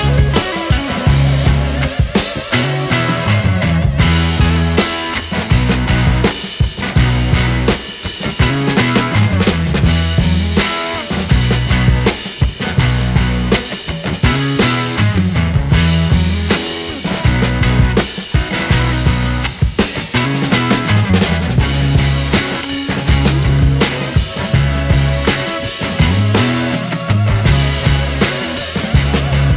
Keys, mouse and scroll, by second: 1.5 scroll up 3, 2.1 click, 2.9-3.6 scroll up 1, 3.6-4.6 middle drag, 4.6-7.1 drag, 7.1-7.6 scroll down 3, 7.6 middle click, 8.1 shift+a, 10.5 click, 11.0 middle click, 11.4-13.2 drag, 13.2-14.6 scroll up 2, 14.6-16.5 drag, 16.7-19.7 drag, 21.8-24.4 drag, 24.4-24.9 middle drag, 24.9 shift+a, 28.4 click.